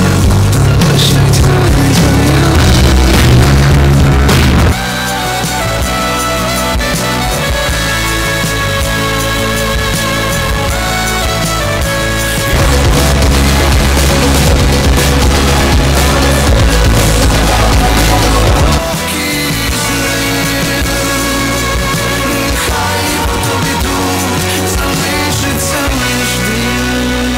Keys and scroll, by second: 5.1 Page_Down, 18.9 Page_Down.